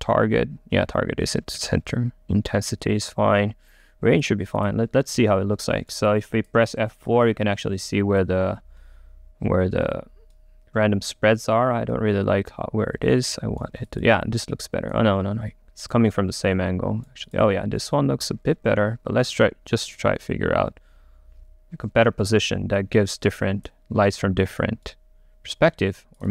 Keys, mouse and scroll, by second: 7.2-10.3 middle drag, 12.0-15.9 middle drag, 15.9 click, 16.6 right click, 17.3-19.4 drag, 19.4-22.9 right drag, 22.9-25.0 drag, 25.0-26.3 right drag.